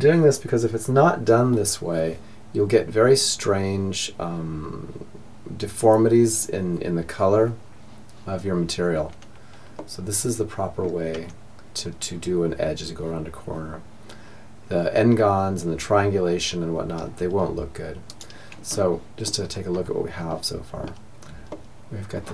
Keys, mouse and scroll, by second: 8.8-10.7 middle drag, 10.2 Tab, 17.8-22.3 middle drag.